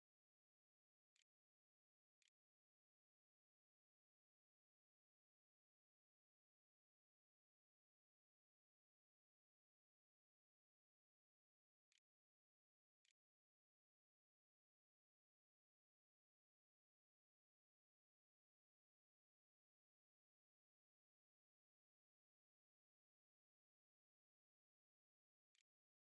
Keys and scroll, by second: 0.0-0.7 typing, 1.5 ctrl+z, 1.7 ctrl+s, 3.1 a, 12.3 ctrl+a, 12.8 ctrl+s, 13.3 a, 13.3 Tab, 24.6-26.0 typing.